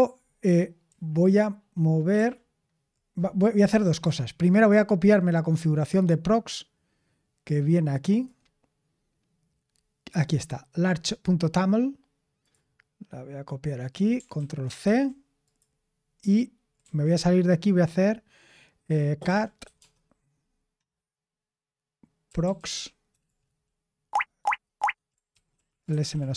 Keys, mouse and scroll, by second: 2.1 super+l, 4.3-8.1 scroll up 1, 8.1-10.2 scroll up 1, 10.2-12.4 scroll up 1, 12.4-14.1 scroll up 1, 14.1 scroll up 1, 14.3 ctrl+a, 14.8 ctrl+c, 16.8 q, 18.9-20.1 typing, 22.0-23.3 typing, 24.4 Tab, 24.7 Tab, 25.3-26.3 typing.